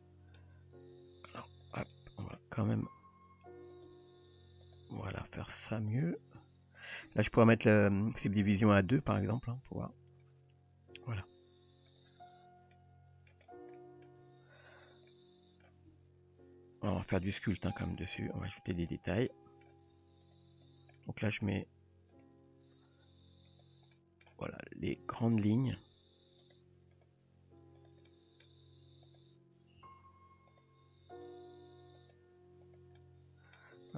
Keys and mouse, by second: 0.0-0.4 middle drag, 2.0-2.4 middle drag, 3.0 r, 3.9 g, 5.2 drag, 6.0 drag, 6.4 g, 7.1 Tab, 10.3 click, 12.7-13.3 middle drag, 13.8 middle drag, 14.2 Tab, 14.8 click, 15.1-15.6 middle drag, 16.0 g, 17.8 click, 18.3 g, 18.8 click, 19.3 middle click, 20.0 g, 21.0-21.4 middle drag, 23.5 click, 23.9-24.3 middle drag, 25.3 click, 25.8 g, 27.0 click, 27.8 click, 28.1 middle drag, 29.0 click, 29.8 r, 31.2 drag, 32.0 drag, 32.7 drag, 33.0-33.6 middle drag.